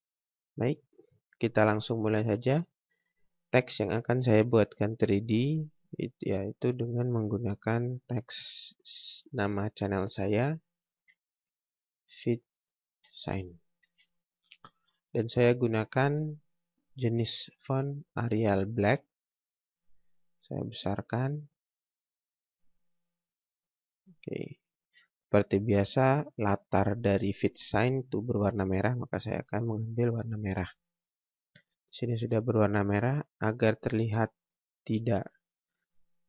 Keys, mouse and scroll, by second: 2.9 click, 7.9 click, 11.3 typing, 13.5 typing, 13.8 ctrl+space, 14.9 click, 18.7 click, 30.1 click, 33.7 scroll up 1, 34.2 scroll down 1, 35.0 scroll up 1.